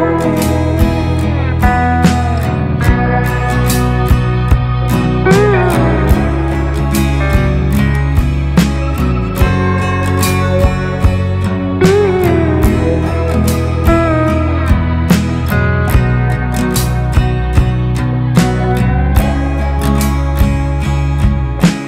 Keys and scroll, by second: 1.4 ctrl+c, 3.9 ctrl+f, 7.5 ctrl+x, 8.7 ctrl+z, 15.6 ctrl+space, 16.9 Delete, 18.3 ctrl+space.